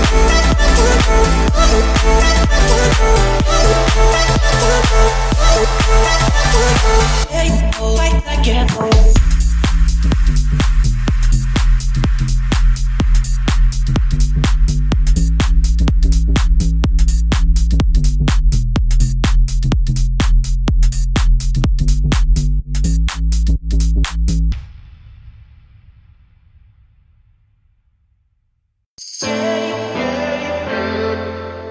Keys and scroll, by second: 10.5 Escape, 13.2 o, 16.1 Escape, 19.6 1, 19.7 5, 20.1 Return, 21.7 2, 22.2 Return, 22.6 Escape, 24.3 Escape, 26.7 Escape, 27.2 Escape, 28.4 Escape.